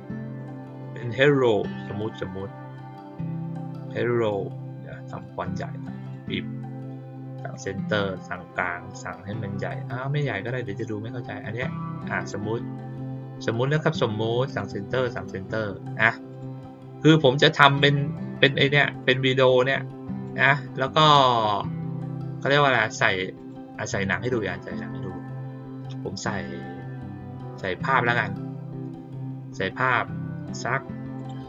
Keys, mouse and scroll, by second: 0.3 click, 0.7 click, 2.1 click, 5.0 click, 6.0 click, 7.4 click, 10.7-12.2 drag, 14.4 click, 15.1 click, 16.2 click, 17.7-18.4 drag, 19.0-20.2 drag, 22.3 click, 23.3 click, 24.2 click, 28.0 click, 31.1 click.